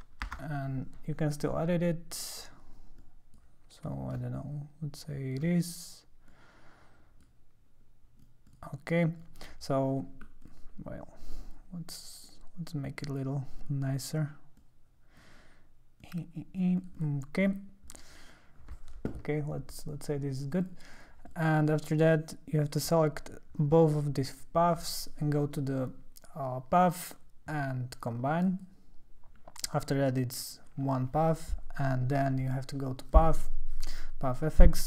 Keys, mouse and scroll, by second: 0.3 Return, 1.4 click, 2.2 click, 3.0 click, 4.1-5.4 shift+drag, 6.3 click, 8.5 click, 9.2 click, 10.4 click, 11.3 click, 12.3 click, 13.6 click, 14.6 click, 16.0 click, 16.8 click, 17.0 click, 17.5 click, 17.9 click, 20.6 click, 20.9 click, 21.3 click, 21.7-22.7 drag, 25.1 click, 28.4 click, 33.1 click, 34.4 click.